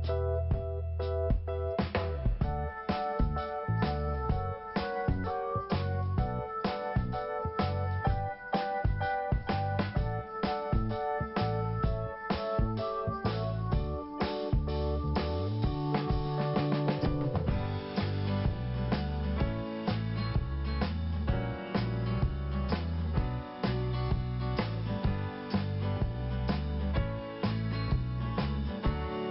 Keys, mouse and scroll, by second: 0.2 click, 1.8 click, 1.9 click, 2.6 click, 4.4 click, 4.5 click, 5.6 click, 5.6 click, 6.4 click, 8.6 click, 9.7 click, 11.3 click, 11.4 click, 12.0 click, 14.0 click, 15.2 click, 20.4 scroll down 1, 21.3 click, 21.4 click, 21.9 click, 22.8 click, 26.0-26.4 scroll down 1, 27.6 scroll up 1, 28.6 click.